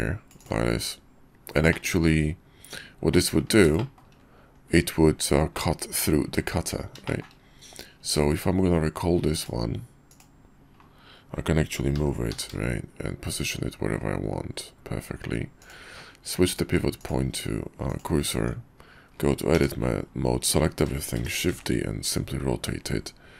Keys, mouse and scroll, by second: 3.7-4.0 shift+middle drag, 5.5-6.1 middle drag, 6.2 `, 8.1 q, 12.1 g, 15.8-17.0 middle drag, 17.0-18.0 drag, 18.0 middle click, 18.4 Tab, 19.1 middle click, 19.5 a, 21.3 shift+d.